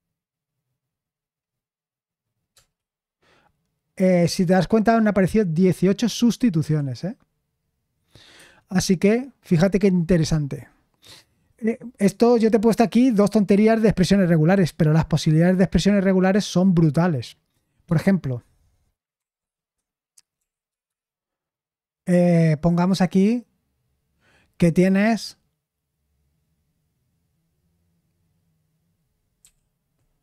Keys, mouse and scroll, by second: 2.5 Return, 6.6 typing, 8.3 Escape, 19.1 shift+g, 20.4 typing, 20.7 Return, 20.8 Return, 29.4-30.2 typing.